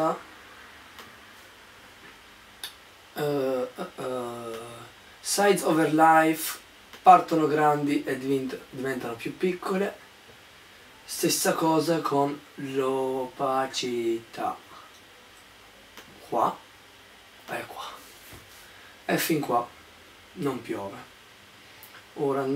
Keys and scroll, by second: 0.0-0.9 typing.